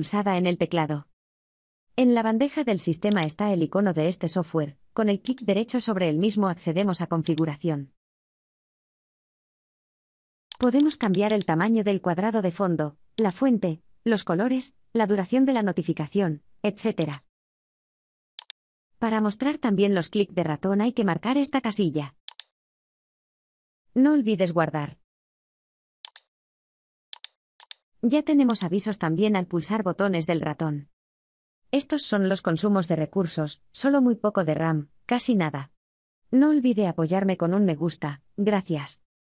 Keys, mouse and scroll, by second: 0.0-2.2 typing, 3.1 click, 5.4 right click, 5.6 right click, 7.4 click, 26.4 click, 27.6 right click, 30.4 click.